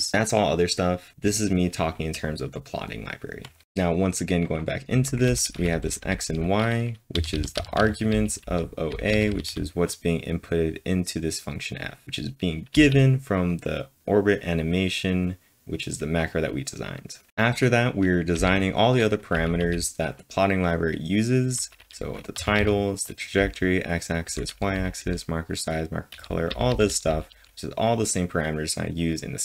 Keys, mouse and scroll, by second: 4.7-9.4 typing, 11.5-13.2 typing, 17.3 typing, 18.3-20.1 typing, 21.3-27.8 typing.